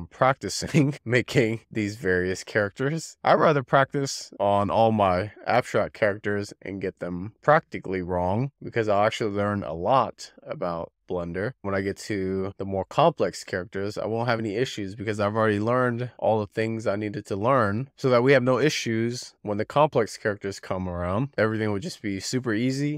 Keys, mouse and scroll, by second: 0.4 click, 0.5 z, 0.6 scroll down 2, 1.4 click, 1.7 z, 1.9 f, 2.3 click, 2.7 z, 3.1 click, 3.3 z, 3.3-4.6 drag, 4.8 z, 5.2 click, 5.5 alt+z, 5.8 alt+z, 6.5-9.0 typing, 6.7 click, 7.1 click, 7.5 click, 8.0 click, 8.5 click, 9.2 click, 10.2 click, 10.9 click, 11.1 z, 11.4 click, 11.8 scroll down 4, 12.0 middle click, 13.0-13.3 scroll up 10, 13.3 ctrl+shift+middle click, 14.2 scroll up 1, 14.4 click, 15.5 click, 16.4 click, 17.5 click, 18.5 scroll down 6, 18.6 middle click, 18.9-19.5 scroll up 6, 19.0 shift+middle click, 19.5 click, 20.0 scroll down 1, 20.1 click, 21.7 click.